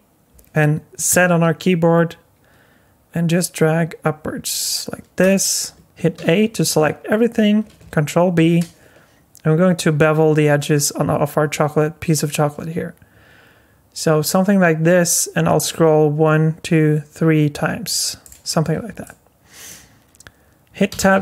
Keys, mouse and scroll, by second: 5.8 Tab, 6.2 a, 8.4 ctrl+b, 18.2 click, 19.0 middle click, 20.9 Tab.